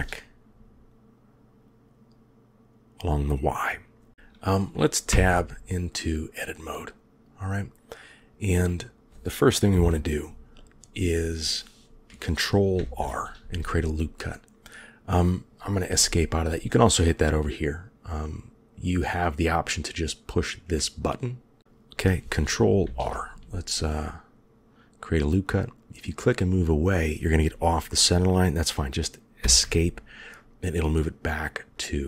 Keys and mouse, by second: 5.4 Tab, 9.6 KP_1, 12.7 ctrl+r, 20.6 click, 21.6 ctrl+z, 22.7 ctrl+r.